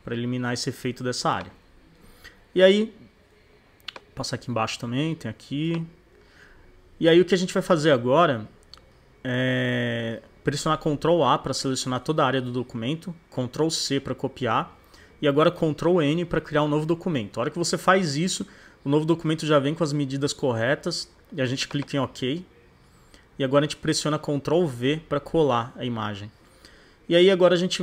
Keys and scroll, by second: 2.0 super+-, 7.1 super+=, 8.9 super+=, 9.4 super+-, 11.8 super+a, 13.8 super+c, 16.1 super+n, 24.4 super+v.